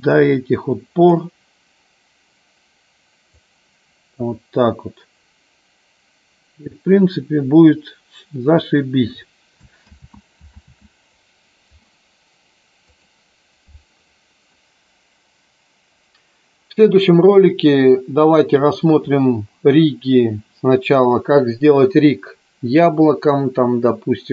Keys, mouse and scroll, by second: 0.1-1.2 drag, 3.4 click, 10.1 ctrl+z, 10.7 ctrl+z, 12.9 click.